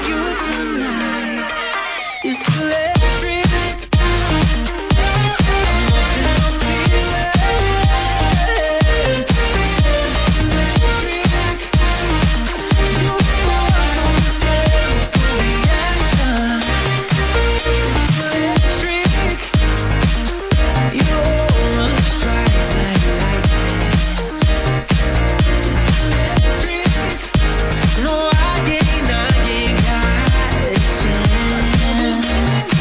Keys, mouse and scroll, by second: 2.2 click, 3.7-4.5 typing, 6.1 click, 6.6 ctrl+z, 9.0 click, 9.6-10.5 typing, 11.9-12.2 scroll up 1, 12.6-13.3 typing, 12.7 scroll, 14.5 click, 15.6 double click, 16.7 click, 17.4 ctrl+z, 17.6 ctrl+z, 19.0 click, 22.4 ctrl+z, 22.7 ctrl+z, 24.2 click, 25.2 click, 30.8 scroll down 1.